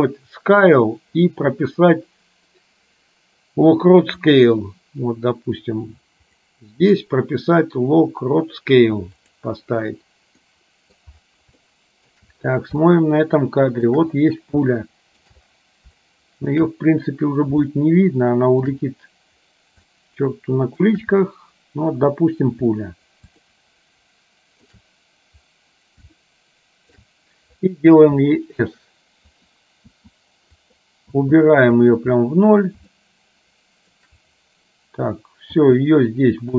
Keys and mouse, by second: 4.3-6.8 drag, 9.5 click, 10.6 middle click, 11.7 shift+middle click, 12.8-14.0 shift+middle drag, 14.8 shift+middle click, 16.1 shift+middle click, 17.8-18.8 shift+middle drag, 20.1 shift+middle click, 23.6-24.8 shift+middle drag, 26.3 shift+middle click, 28.3 s, 30.0 s, 33.2 shift+middle click, 35.6 s.